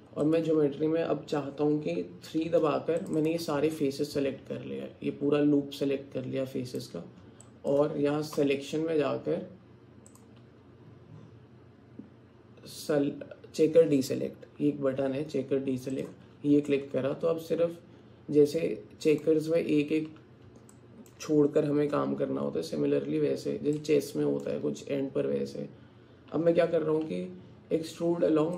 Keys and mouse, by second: 2.5 3, 3.0 click, 3.8-6.8 drag, 7.5 alt+click, 16.7-18.6 alt+middle drag, 18.6 alt+click, 20.7 alt+middle click, 23.8 middle click.